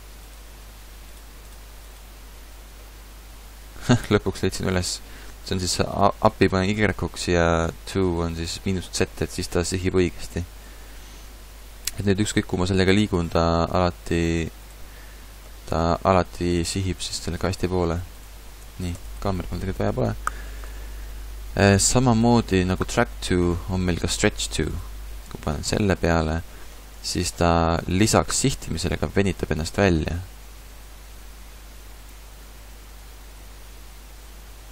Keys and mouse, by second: 4.0 middle click, 9.9 KP_0, 11.9 g, 15.9 g, 18.6 x, 24.4 click, 25.4-27.1 drag, 27.1-31.8 middle drag, 28.6 g.